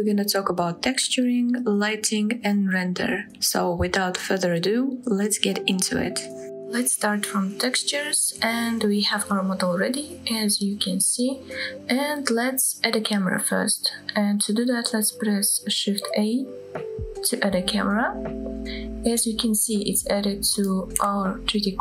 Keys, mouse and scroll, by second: 0.0-0.5 middle drag, 0.7-1.2 scroll down 1, 1.2-3.3 middle drag, 3.5-5.6 scroll up 2, 6.6 middle click, 7.5-9.3 middle drag, 9.6-10.0 scroll down 2, 10.0-10.6 middle drag, 10.7-11.5 middle drag, 11.7-12.1 scroll up 2, 12.2 shift+middle click, 13.0-13.6 scroll down 2, 13.7-14.8 middle drag, 17.1 shift+a, 18.4 scroll down 1, 18.7-19.5 middle drag, 19.6-20.0 scroll down 1, 20.0-20.5 middle drag.